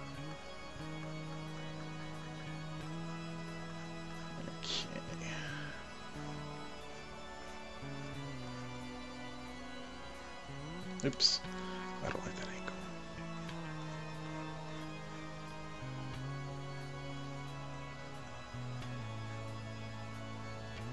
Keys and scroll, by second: 11.7 ctrl+alt+z.